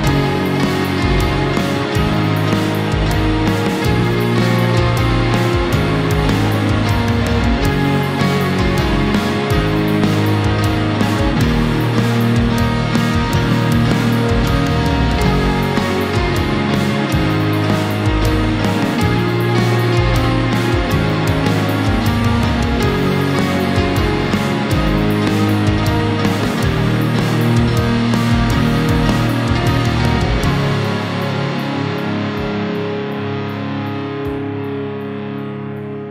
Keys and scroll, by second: 23.0 ctrl+-, 30.3 ctrl+0.